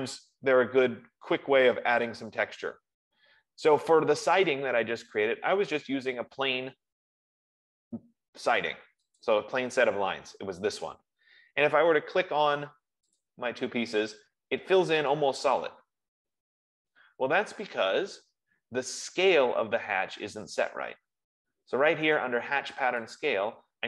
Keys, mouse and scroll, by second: 0.1-1.1 scroll down 1, 1.1-2.1 scroll down 1, 3.5 middle click, 3.6 middle click, 9.6 click, 10.2 F15, 13.5 click, 15.5 click, 23.4-23.8 drag.